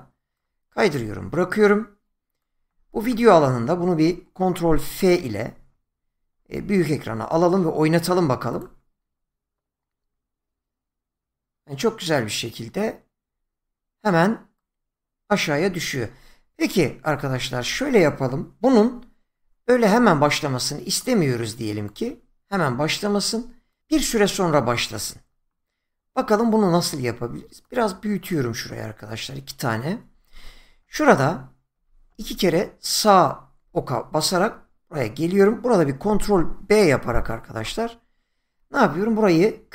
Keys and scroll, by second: 5.5 ctrl+f, 31.7 Right, 37.6 ctrl+b.